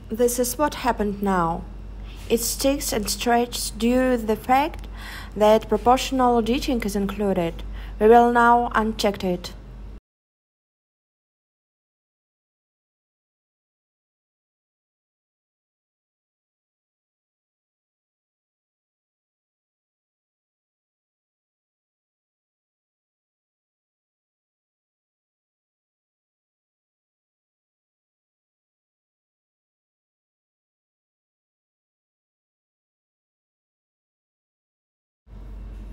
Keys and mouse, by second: 0.2 z, 0.7 0, 1.7 click, 2.3 super+z, 5.5 s, 5.9 z, 6.3 0, 6.9 Return, 14.3 e, 16.7 click, 17.4 s, 18.8 click, 19.6 e, 22.0 s, 29.7 alt+shift+click, 29.7 alt+shift+right click, 30.5 click, 30.5 right click, 31.1-32.3 shift+drag, 31.1-32.3 shift+right drag, 33.7 shift+click, 33.7 shift+right click.